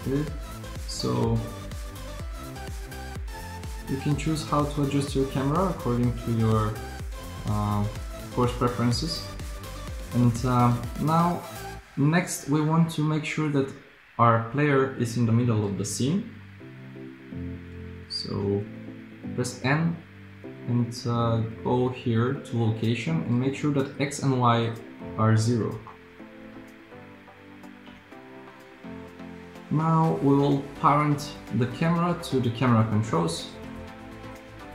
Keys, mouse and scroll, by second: 1.0 g, 18.5 n, 28.0 n.